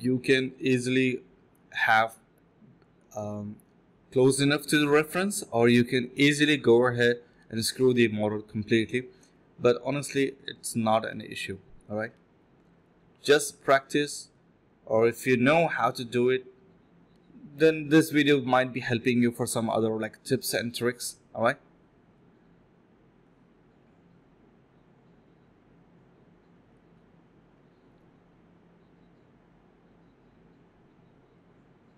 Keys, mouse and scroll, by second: 0.5 alt+click, 2.2 alt+click, 2.3 alt+double click, 2.3 alt+click, 3.1 alt+click, 3.8 ctrl+shift+click, 4.6 f, 4.7 alt+click, 4.9 alt+click, 5.0 alt+click, 5.3 alt+click, 5.5 alt+click, 5.6 alt+click, 5.9 typing, 6.2 shift+click, 6.2 shift+double click, 6.3 shift+click, 9.8 alt+click, 10.0 alt+click, 10.4-11.6 typing, 11.0 ctrl+b, 12.7 typing, 15.5 alt+click, 20.6 alt+click, 22.0 alt+click, 22.5 alt+click, 23.0-24.4 typing, 26.2 typing, 26.5 alt+click, 26.8 alt+click, 27.8-29.9 typing, 31.0-31.9 typing, 31.1 alt+click, 31.3 alt+click.